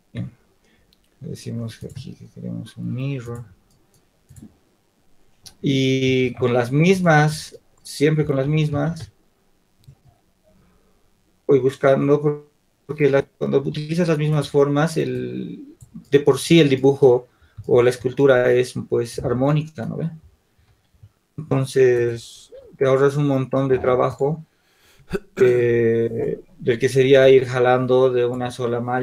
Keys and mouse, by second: 6.3 shift+d, 8.3 s, 14.4 r, 15.5-17.3 drag, 21.7 shift+d, 22.7 r, 25.1 click, 26.1-27.1 right drag, 27.1-29.0 middle drag.